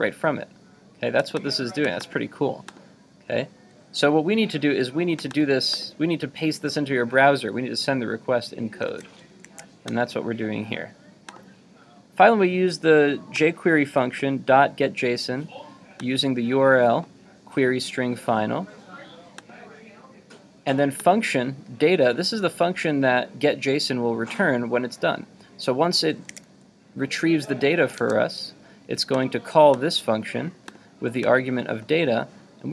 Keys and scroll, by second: 8.9 super+w, 9.6 super+Tab, 26.3 super+Tab.